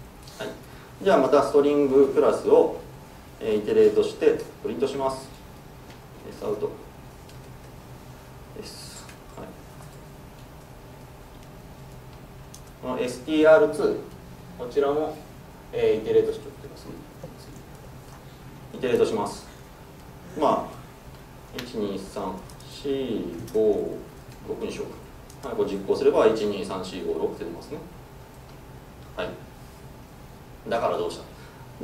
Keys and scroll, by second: 3.5 Escape, 3.8 alt+Return, 7.6 Tab, 9.1 Tab, 9.5 Escape, 10.8 super+c, 11.0 super+v, 25.9 ctrl+shift+F10.